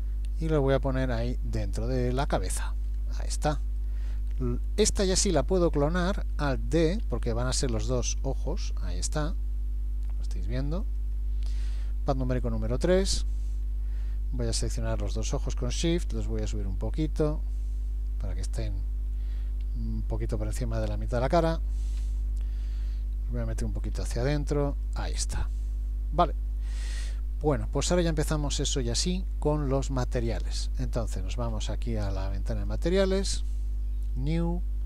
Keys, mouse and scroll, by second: 2.9-3.3 scroll up 4, 3.8 shift+middle click, 7.1 alt+d, 12.4 KP_3, 14.7 shift+click, 16.1 g, 19.7 g, 22.0 KP_7, 24.0 g, 25.6 middle click, 28.6 scroll down 1, 29.2 shift+middle click, 32.7 click, 34.1 click.